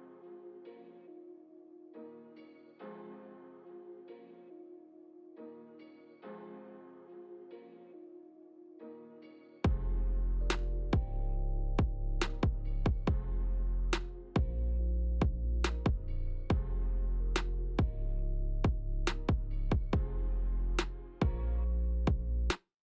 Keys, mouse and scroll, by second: 1.1 click, 2.4 middle click, 3.9 click.